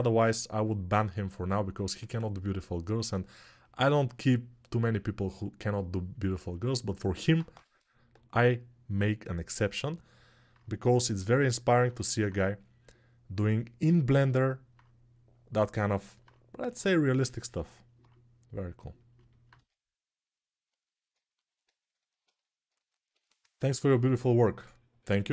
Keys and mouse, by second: 7.3 g, 17.6-18.9 alt+middle drag, 19.3 1, 19.6-20.9 middle drag, 22.5 alt+shift+click, 22.5 alt+shift+middle click.